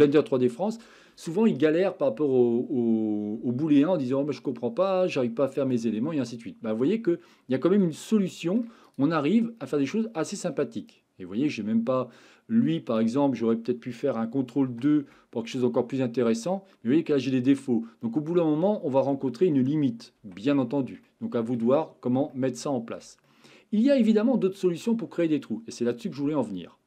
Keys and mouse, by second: 6.7-7.8 middle drag, 8.2-8.6 shift+middle drag, 9.8-10.5 shift+middle drag, 14.9 ctrl+2, 15.6-16.9 middle drag, 20.3 ctrl+z, 21.0-21.6 middle drag, 22.3-23.0 shift+middle drag, 23.3-24.2 middle drag, 24.5 shift+middle click.